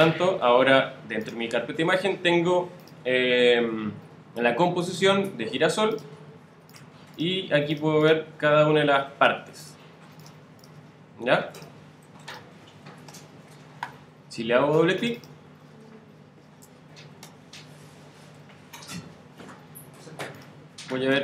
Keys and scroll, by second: 18.3 alt+super+-, 19.9 alt+super+z, 20.5 alt+z.